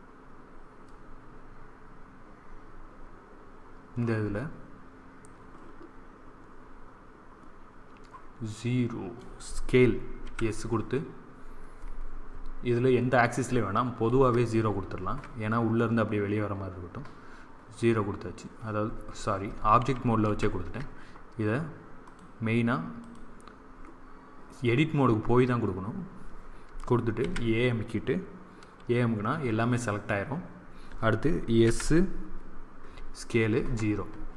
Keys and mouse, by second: 10.1 s, 20.1 ctrl+z, 21.9-23.9 drag, 27.1 a, 31.6 s.